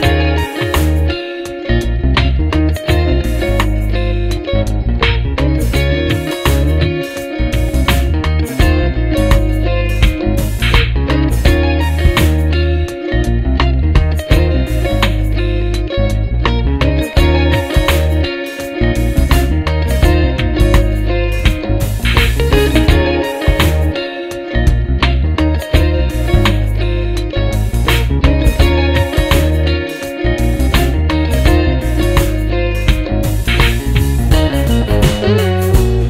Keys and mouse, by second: 1.0 x, 5.0 x, 7.7 x, 11.9 ctrl+-, 12.4 ctrl+-, 13.4 ctrl+0, 17.6 right click, 25.7 ctrl+m.